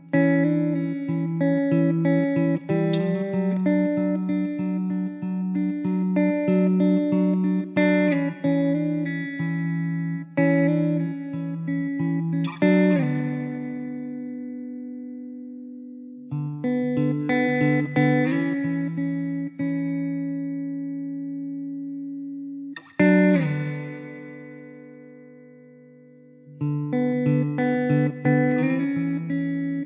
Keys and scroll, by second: 0.1 s, 3.1 s, 11.9 s, 14.3 s, 16.7 shift+d, 19.1 s, 20.5 s, 26.1 ctrl+z, 28.1 s.